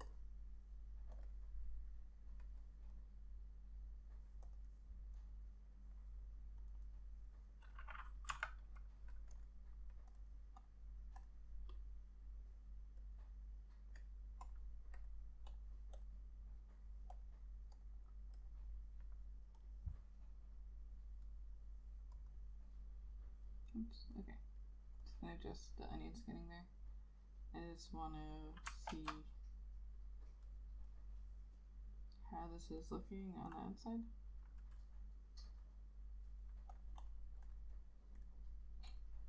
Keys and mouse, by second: 4.7 double click, 8.4 F6, 22.4 double click, 29.0 ctrl+z, 33.1 double click.